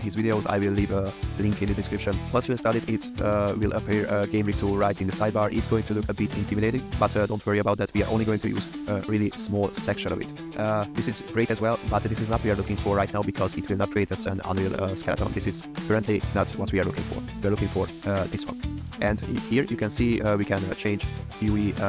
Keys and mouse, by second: 7.7 click, 10.6 click, 16.8 click, 19.2-20.7 drag.